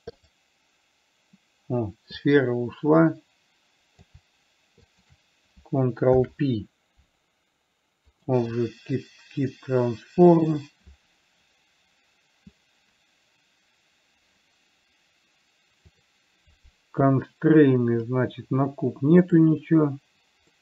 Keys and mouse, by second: 0.6 click, 2.7-4.5 drag, 5.1 shift+click, 6.4 ctrl+p, 10.7 click.